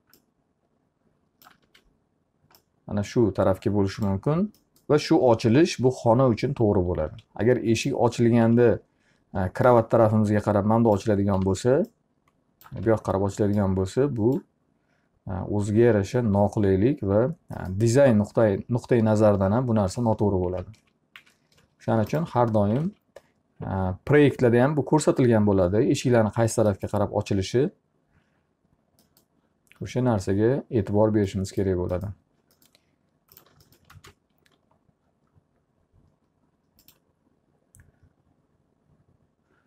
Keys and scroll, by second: 2.2 w, 7.2 alt+r, 9.0 e, 12.0 w, 13.4 e, 20.6 ctrl+z, 23.3 alt+a, 34.0 ctrl+space.